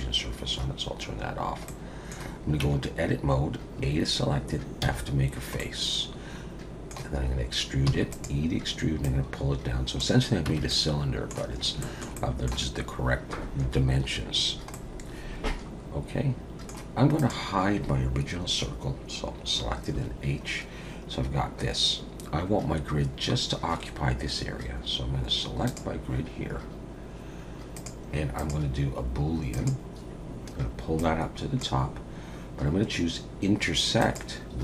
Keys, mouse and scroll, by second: 1.7 middle click, 2.6 Tab, 3.8 a, 5.2-5.6 scroll down 2, 5.2 f, 5.6 middle click, 7.9 e, 9.0 click, 10.5 Tab, 10.7 middle click, 11.6 scroll up 1, 11.8 shift+middle click, 12.1 middle click, 14.7 middle click, 17.2 click, 19.9 h, 25.7 click, 27.7 click, 28.4 click, 31.0 click, 34.1 click.